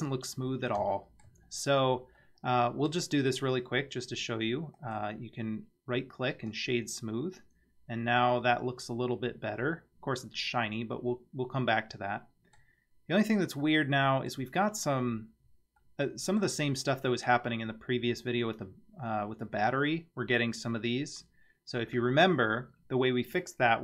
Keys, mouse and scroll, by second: 0.4-0.8 scroll down 1, 0.9-1.2 shift+middle drag, 1.5-2.2 scroll up 2, 2.2-2.9 middle drag, 4.8-6.5 right drag, 7.4-12.6 middle drag, 13.6-14.3 middle drag, 15.4 scroll up 2, 15.8-16.4 middle drag.